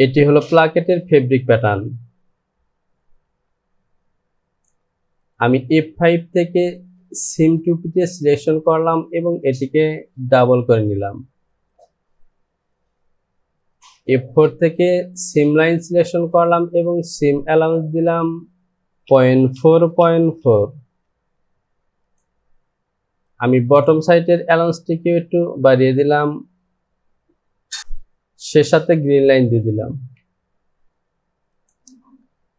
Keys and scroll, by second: 3.4 Home, 18.7 Down, 19.1 KP_Decimal, 19.5 KP_4, 19.7 Down.